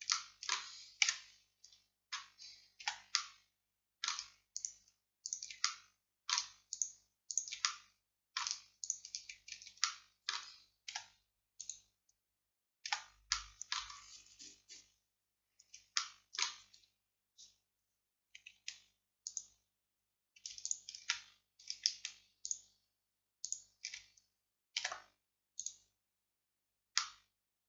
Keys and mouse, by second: 1.1 KP_Decimal, 2.9 z, 8.0-9.9 drag, 11.0 x, 12.9 z, 19.3 click, 21.3-22.4 middle drag, 22.4-27.6 drag, 24.9 x.